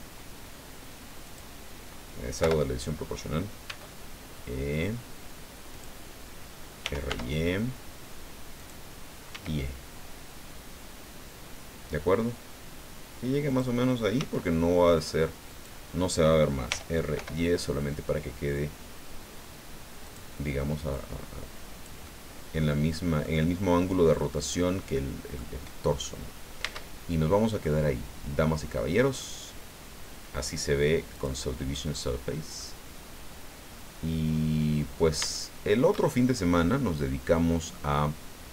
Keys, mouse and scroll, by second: 1.2 click, 2.4 o, 3.6 e, 5.7 click, 6.6-7.5 typing, 8.6 click, 9.3 e, 13.5 click, 14.2 s, 15.5 click, 16.7 r, 17.1 y, 20.0 click, 20.9-22.0 drag, 22.0-23.4 middle drag, 24.1 click, 25.4 middle click, 26.2 scroll up 1, 26.6 Tab, 26.9-27.5 scroll down 2, 27.6-29.3 drag, 31.1 click, 31.7-32.2 scroll up 1, 32.6-35.2 middle drag, 35.3 shift+middle click, 36.2 shift+scroll down 2, 36.5-38.2 middle drag.